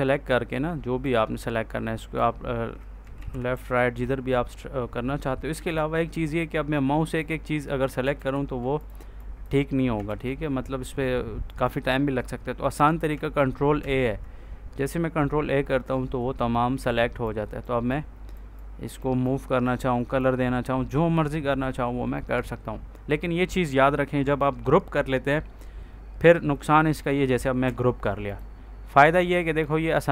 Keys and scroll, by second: 3.1 ctrl+z, 8.0 ctrl+z, 9.9 ctrl+z, 13.7 ctrl+a, 27.2 ctrl+g.